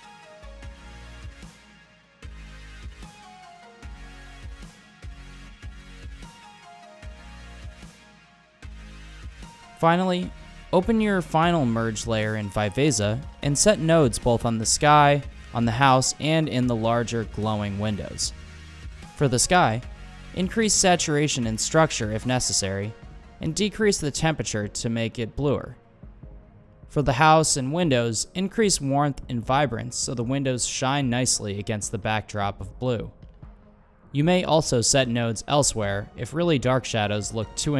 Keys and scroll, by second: 4.2 super+e, 5.8-8.4 typing, 18.6 super+c, 18.7 super+v, 19.5 super+c, 19.7 super+v, 29.6 super+c, 30.2 super+v.